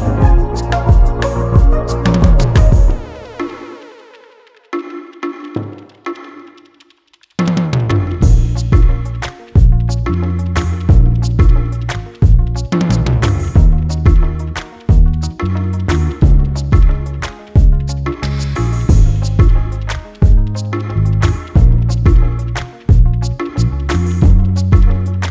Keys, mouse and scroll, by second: 0.2-0.7 scroll down 1, 1.0 scroll up 1, 1.8 click, 5.1 scroll down 1, 5.7 click, 6.2 scroll down 1, 6.8 scroll up 1, 8.4 Delete, 9.1 click, 9.5-10.2 scroll up 1, 10.2 click, 12.2 click, 14.4-14.8 scroll down 1, 15.1 click, 15.6 scroll up 1, 16.6 click, 17.8 ctrl+z, 18.0 click.